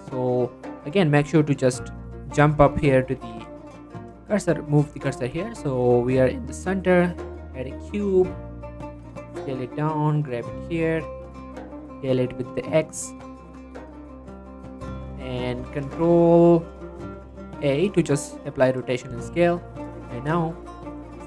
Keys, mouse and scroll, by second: 1.2 shift+s, 2.2 shift+s, 3.2 Tab, 3.9 shift+middle click, 4.1-4.5 scroll up 1, 4.7 shift+middle click, 5.3 shift+a, 6.3 click, 6.7 s, 7.4 click, 7.8 s, 8.9 click, 9.1 g, 9.4 z, 10.4 click, 10.6 s, 11.0 click, 11.1 s, 11.4 x, 13.1 click, 13.7 s, 13.9 z, 14.6 click, 15.3-15.6 scroll down 2, 15.6 g, 15.9 z, 16.3 click, 17.1 ctrl+a, 18.0-18.3 drag, 18.3-18.8 scroll down 2, 18.8 scroll up 1, 18.9-19.3 shift+middle drag, 19.3 Tab, 20.6 click.